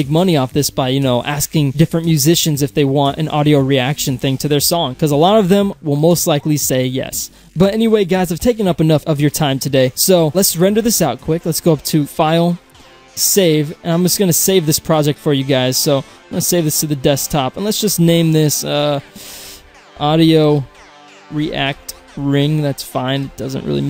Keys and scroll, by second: 23.4 Return.